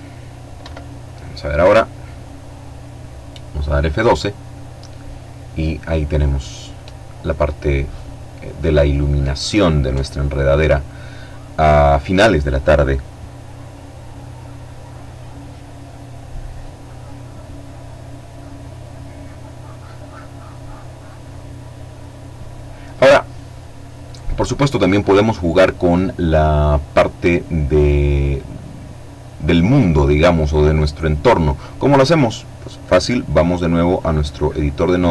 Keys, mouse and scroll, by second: 30.9 click, 32.7 click, 34.1-35.1 drag.